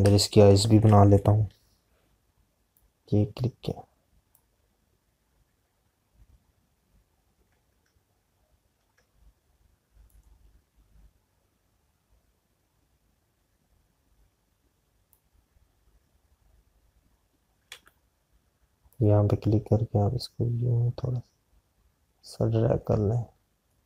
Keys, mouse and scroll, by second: 4.2 click, 17.8 click, 19.1 z, 19.7 click.